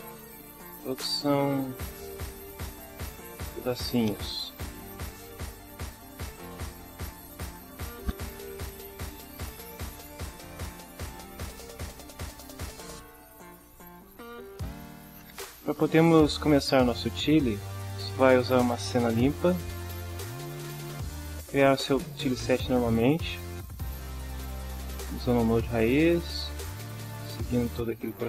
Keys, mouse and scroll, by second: 0.4-0.7 drag, 0.9 drag, 1.3 click, 2.5 click, 3.0 click, 3.4 click, 6.9 click, 9.1 click, 10.3-11.1 scroll up 1, 11.4 scroll up 1, 12.3 scroll up 1, 12.5 scroll down 1, 13.8-14.8 drag, 19.9-20.3 drag, 23.7 click, 24.9 drag, 26.0 drag, 27.0 s, 27.3 p.